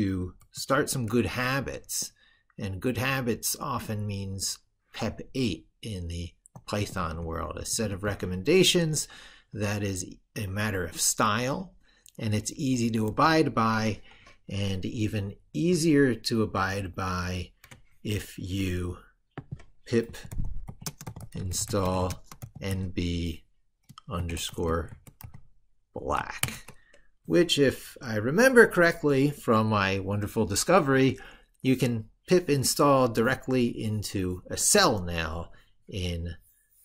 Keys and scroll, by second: 16.3 ctrl+super+Right.